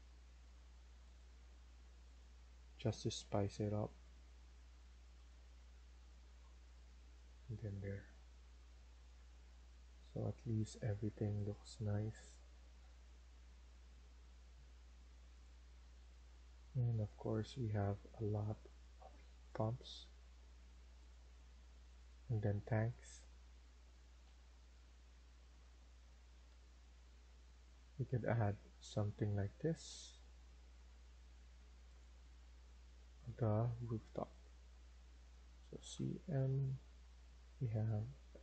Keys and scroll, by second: 5.9 Escape, 6.2 Escape, 24.1 Down, 25.0 Down, 25.8 Down, 27.6 Down, 28.2 Down, 35.8-36.2 typing.